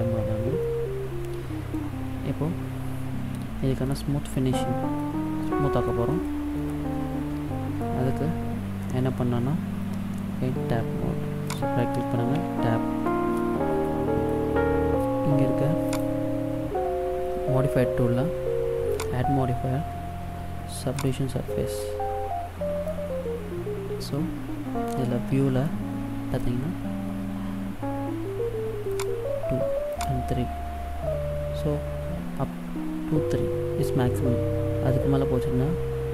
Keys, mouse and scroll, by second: 0.7 middle click, 2.1-4.0 scroll down 3, 4.0 middle click, 5.2-5.6 scroll up 3, 5.6 middle click, 6.2 middle click, 6.2-6.6 scroll up 1, 6.8 middle click, 10.5 Tab, 11.5 right click, 12.4 Tab, 13.1 middle click, 15.9 click, 19.0 click, 21.9 middle click, 23.0-24.2 scroll up 1, 25.7 middle click, 29.0 click, 29.9 click.